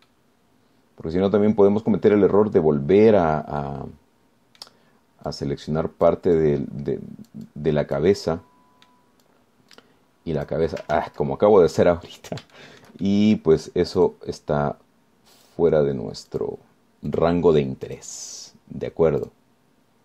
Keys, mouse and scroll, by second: 0.4-1.2 scroll down 1, 1.3 right click, 2.2 scroll down 1, 4.4 scroll up 1, 4.8-6.0 right drag, 6.5 click, 7.6-9.4 drag, 9.5 click, 10.4-11.9 drag, 12.2 ctrl+z, 12.8 ctrl+scroll up 3, 13.8-14.8 shift+drag, 15.2 click, 16.6 click, 17.5 click, 18.3 click, 19.1 click.